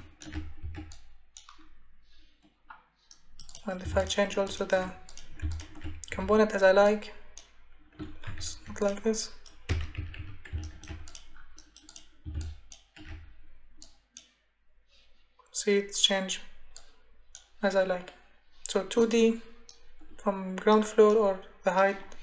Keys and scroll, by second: 6.1 space, 8.2 ctrl+z, 10.0 Escape.